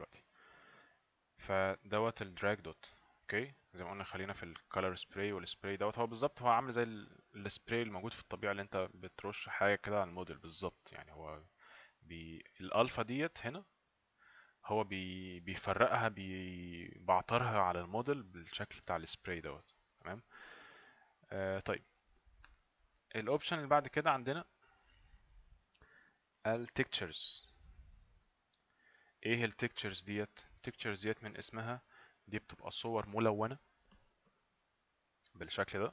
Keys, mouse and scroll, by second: 1.6 click, 14.0 click, 23.8 click, 26.4 click, 29.4 click.